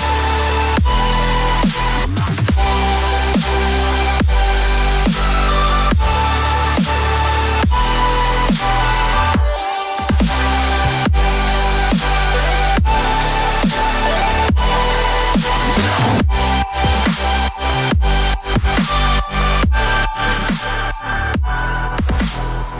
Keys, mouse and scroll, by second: 3.2 Up, 4.0 Up, 4.1 Up, 5.0 double click, 6.7 Up, 6.9 Up, 7.0 Up, 7.2 Up, 7.3 Up, 7.6 Up, 14.1 double click, 15.4 Down, 16.2 Down, 16.3 Down, 16.4 Down, 16.6 Down, 16.9 Down, 17.1 Down, 17.7 double click, 20.7 Down, 21.7 Down, 21.9 Down, 22.1 Down, 22.6 Down.